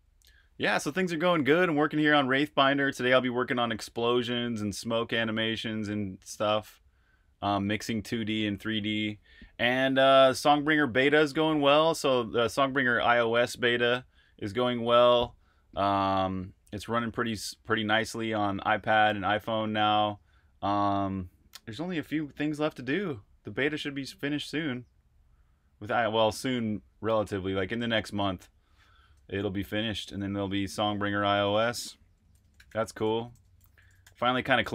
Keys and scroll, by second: 29.6-34.5 typing.